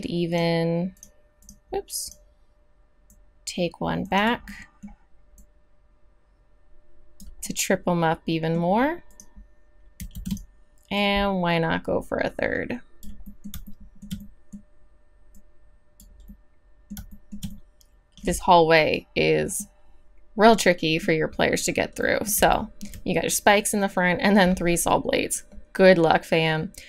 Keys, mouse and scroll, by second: 4.5 middle drag, 4.7-5.3 middle drag, 5.3 right click, 7.4-8.3 middle drag, 10.1 shift+d, 14.0 middle click, 14.2 middle click, 14.3-17.3 middle drag, 20.6-22.5 middle drag, 22.7-26.8 middle drag.